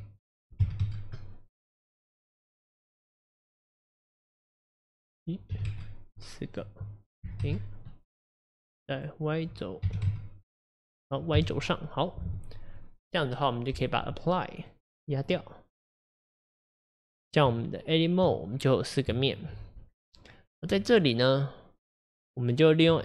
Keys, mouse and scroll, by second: 0.8-1.8 drag, 2.3-3.3 drag, 3.7 click, 5.7-9.1 drag, 10.1-11.4 drag, 11.4 KP_1, 15.3-18.3 drag, 18.3 Tab, 18.7-19.1 scroll up 4, 19.2 shift+middle click, 19.9-20.4 scroll down 2.